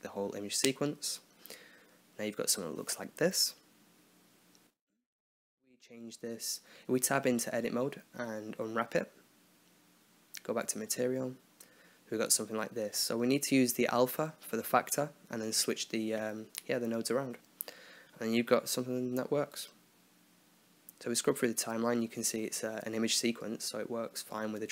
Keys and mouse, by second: 0.0 click, 0.0 a, 4.5-5.6 drag, 6.2 Tab, 6.8 u, 8.6 Tab, 9.6-10.7 drag, 11.0 click, 11.3 click, 12.4 click, 15.0 click, 16.2 middle click, 17.0 middle click, 17.2 middle click, 19.4-20.5 middle drag, 20.5-24.7 drag.